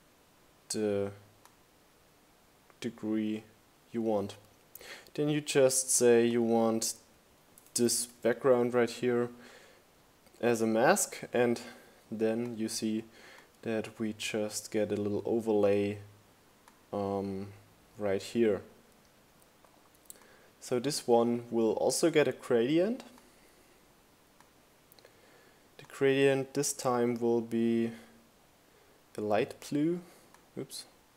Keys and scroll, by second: 6.8-7.7 typing.